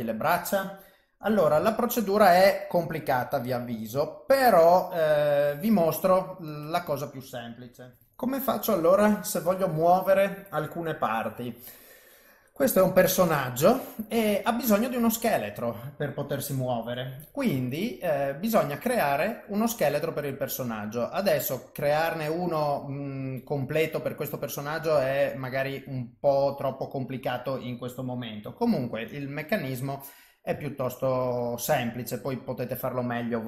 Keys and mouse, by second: 6.3 middle click, 8.1 ctrl+alt+shift+F10, 14.4 middle click, 17.5 KP_1, 29.1 click, 31.0 shift+right click, 32.2 shift+right click.